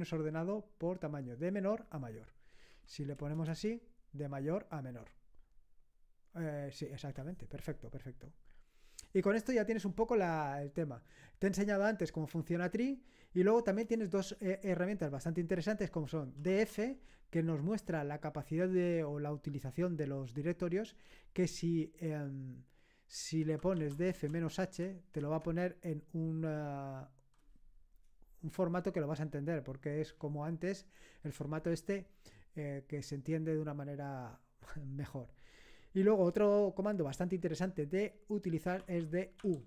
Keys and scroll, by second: 2.7 Up, 3.2 BackSpace, 3.4 Return, 16.1-17.1 typing, 20.9 space, 23.2-24.7 typing, 25.2 Return, 38.8-39.6 typing.